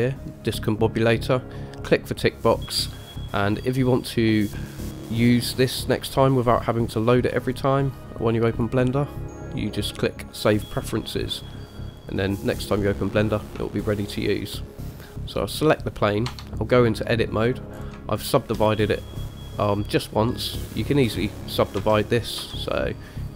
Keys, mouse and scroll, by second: 13.8-14.2 shift+middle drag, 15.6 click, 16.5 Tab, 17.3 middle click, 17.9-18.3 scroll up 2, 18.3 shift+middle click, 22.0 a, 22.6 a.